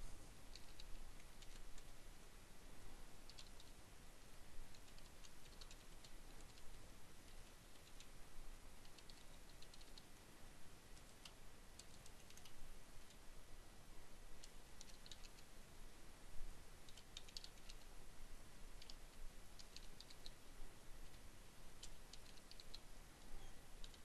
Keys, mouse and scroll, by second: 0.9 shift+Tab, 1.7-3.0 typing, 4.2-9.9 typing, 11.2 ,, 12.3-15.9 typing, 17.2-23.4 typing.